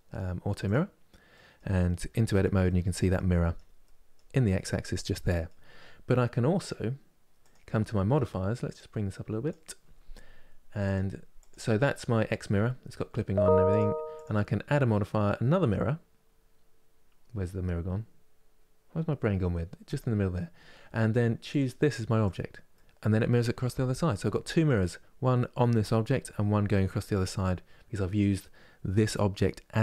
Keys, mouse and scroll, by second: 0.3 click, 1.0 middle click, 1.9 Tab, 2.3-3.0 scroll up 1, 3.0-7.1 middle drag, 7.1-16.9 drag, 21.2-22.4 drag, 22.4-27.0 middle drag.